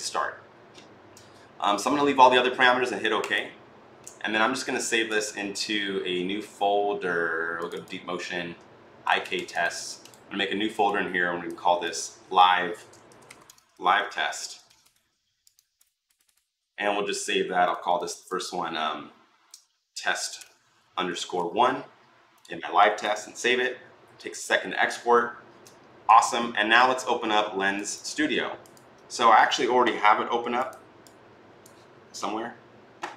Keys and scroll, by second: 12.7-15.1 typing, 19.7-21.7 typing.